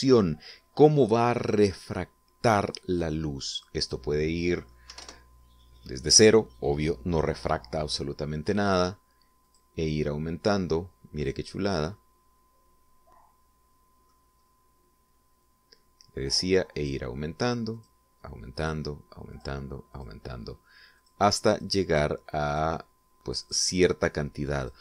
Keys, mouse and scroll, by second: 0.0 middle click, 0.7-2.4 middle drag, 4.1 click, 5.4 0, 5.6 Return, 10.1 click, 11.3 scroll down 2, 11.8-14.8 middle drag, 15.0 scroll up 1, 17.4 click, 18.4 click, 19.2 click, 19.9 click, 20.5 click, 21.6 click, 22.1 click, 22.5 click, 23.1 click, 24.1 click.